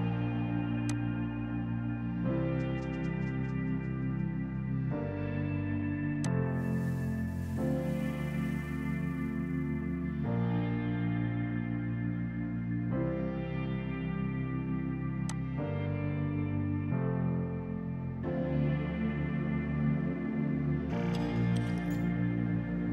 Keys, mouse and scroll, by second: 6.3 click, 10.6 ctrl+z, 15.3 click.